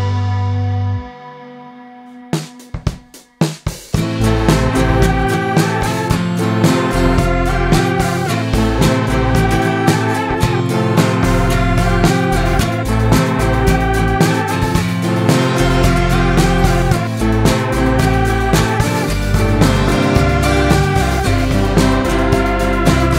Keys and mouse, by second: 2.7-5.1 middle drag, 13.5-15.1 drag, 15.1-17.0 middle drag, 21.6-22.9 drag, 22.9-23.1 middle drag.